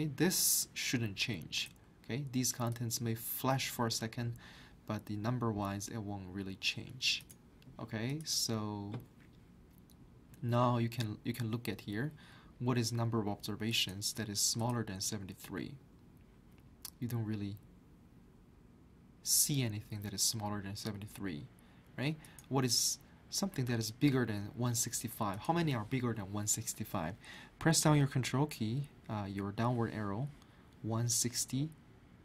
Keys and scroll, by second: 28.6 ctrl+Down.